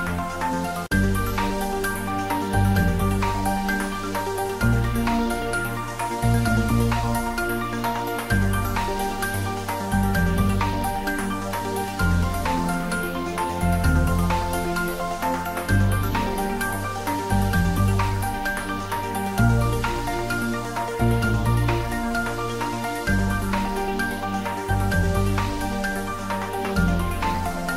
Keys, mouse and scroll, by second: 0.6-2.6 middle drag, 6.7 middle click, 7.3 click, 9.9 click, 11.6 click, 13.9 middle click, 14.5 click, 20.1 Tab, 21.5 click, 21.7 ctrl+s, 22.1 click, 23.4-24.8 ctrl+middle drag, 25.4 middle click, 25.9 click, 27.4 Return.